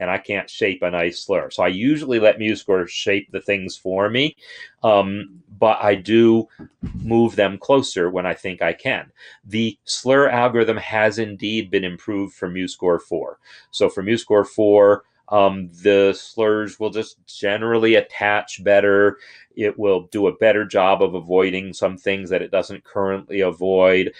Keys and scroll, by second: 4.6 ctrl+r, 9.0 Down, 9.3 Down, 9.5 Down, 9.6-11.4 Down, 14.1 Page_Up.